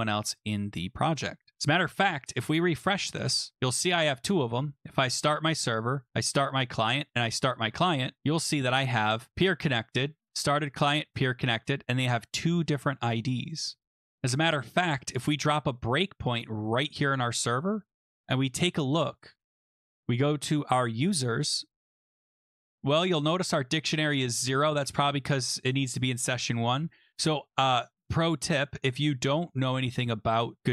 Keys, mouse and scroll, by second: 0.2 click, 2.5 click, 3.5 click, 4.4 click, 5.1 click, 6.2 click, 7.3 click, 8.2 click, 9.3 click, 14.6-16.8 scroll, 16.9 click, 19.5 click, 21.0 click, 24.8 click, 26.7 click, 27.0 click, 27.8 click, 29.7 click.